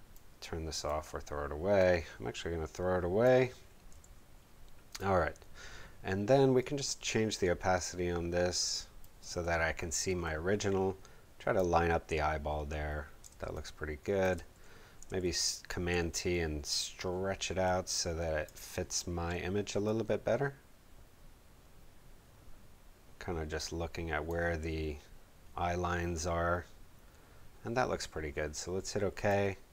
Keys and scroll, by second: 3.9 v, 9.1 space, 13.1 space, 15.2 super+t.